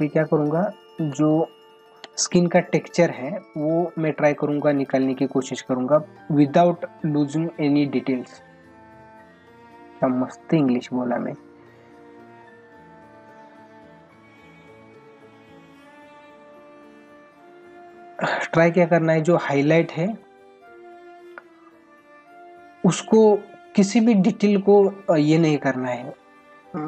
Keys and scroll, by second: 1.1 space, 3.1 ], 4.3 ], 6.8 ], 8.4 ].